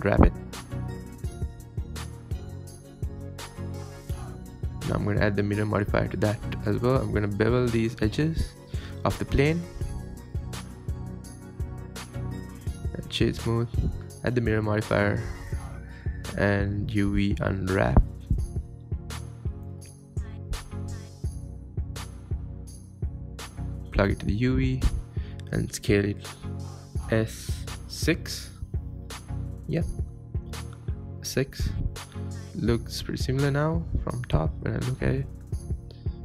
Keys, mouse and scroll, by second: 0.0 s, 0.9 s, 3.6 Tab, 3.9 click, 3.9 scroll down 2, 4.0 middle click, 4.3 Tab, 4.5 middle click, 5.0 scroll up 2, 5.1-6.4 middle drag, 6.4 click, 6.6 middle click, 7.0 shift+click, 7.3 shift+click, 7.3 middle click, 7.7 shift+click, 7.9 scroll up 2, 8.4 ctrl+b, 10.8 Tab, 10.9 scroll up 2, 11.1 middle drag, 11.8 click, 11.9-12.5 scroll down 2, 12.0-12.5 middle drag, 12.5 middle drag, 12.8 right click, 13.0 scroll down 2, 13.1-13.7 middle drag, 13.7 Tab, 14.7 click, 14.8 Tab, 15.4 3, 15.5 click, 16.7 shift+click, 17.1 scroll down 2, 17.2 middle click, 17.5 scroll up 5, 17.7 scroll down 1, 17.7 scroll up 3, 17.8 shift+middle click, 18.2 ctrl+KP_Add, 18.3 ctrl+KP_Add, 18.5 ctrl+z, 19.1 u, 19.4 scroll down 12, 19.8 KP_7, 20.3 click, 20.4 click, 20.7 s, 21.1 Tab, 21.3 Tab, 21.6 click, 21.8 click, 22.1 s, 22.7 ctrl+z, 23.6 click, 24.4 click, 24.8 scroll down 5, 25.4 click, 25.8 scroll up 1, 26.0 click, 26.1 click, 28.2 click, 28.4 s, 29.1 s, 29.9 ctrl+z, 30.4 s, 31.0 s, 31.9 scroll up 4, 32.2 shift+middle click, 32.4 Tab, 33.1 scroll up 1, 33.6 Tab, 33.9 ctrl+z, 34.2 Tab, 34.4 ctrl+z, 34.5 ctrl+z, 34.7 ctrl+z, 35.1 s.